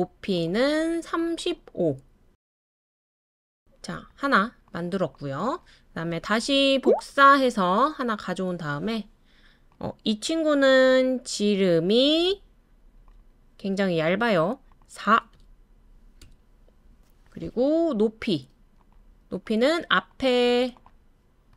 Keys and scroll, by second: 0.8-1.6 typing, 4.3 typing, 7.4 super+c, 7.7 super+v, 15.3 4, 16.2 Return, 18.5 typing.